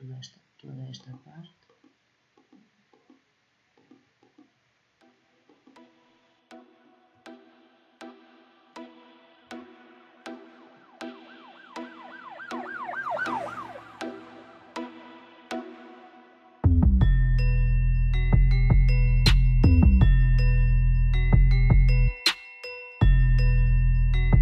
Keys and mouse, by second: 0.7-7.0 middle drag, 7.2 Delete, 8.5 click, 9.1 middle click, 9.8-11.8 drag, 11.8 Delete, 15.8 middle click, 17.4 click, 17.9-19.9 drag, 19.9 middle click, 20.2-22.7 drag, 22.7 middle click, 23.5-24.4 drag.